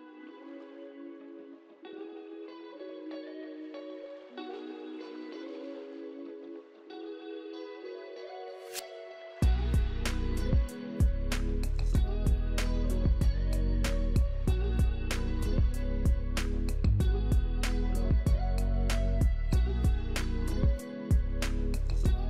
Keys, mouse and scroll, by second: 1.0 double click, 1.5-2.7 typing, 14.0 middle click, 14.5-15.7 scroll down 1, 16.0 ctrl+right click, 21.0 right click, 21.3-21.7 scroll down 1.